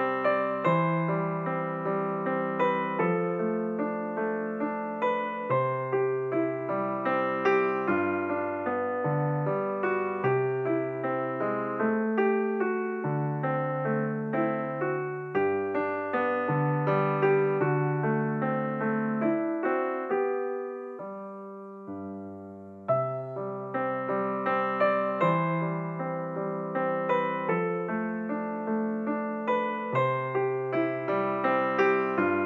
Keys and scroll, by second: 28.2 Escape.